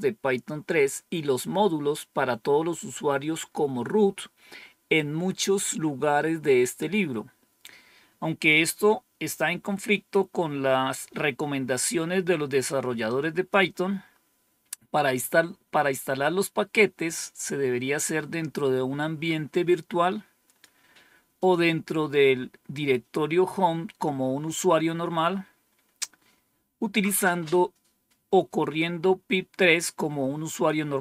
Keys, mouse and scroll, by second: 13.0 click, 19.4-20.5 drag, 21.3 click.